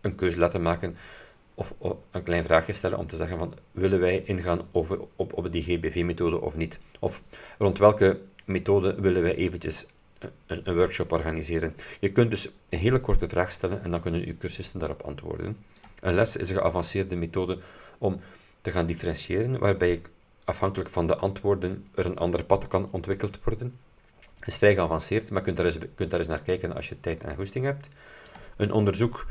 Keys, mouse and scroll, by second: 15.9 click, 28.4 click.